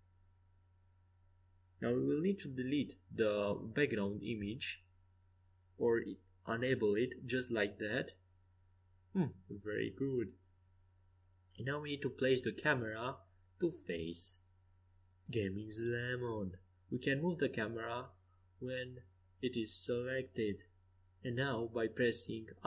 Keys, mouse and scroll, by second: 0.9 g, 5.3 n, 8.6-12.8 drag, 12.8 g, 16.3 r, 22.3 r.